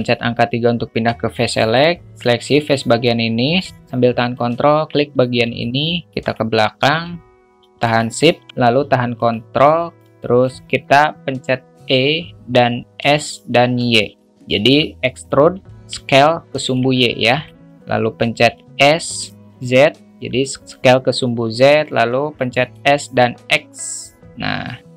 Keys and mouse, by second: 1.5 click, 4.3 ctrl+click, 5.6 alt+middle click, 9.1 ctrl+click, 10.0-10.4 alt+shift+middle drag, 16.0-16.7 alt+middle drag, 17.4 alt+shift+middle drag, 21.5 alt+middle click.